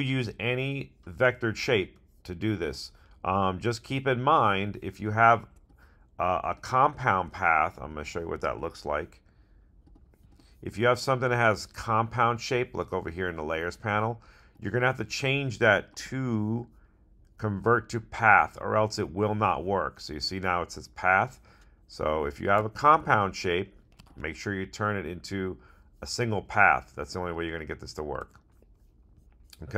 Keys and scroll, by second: 22.9 super+z.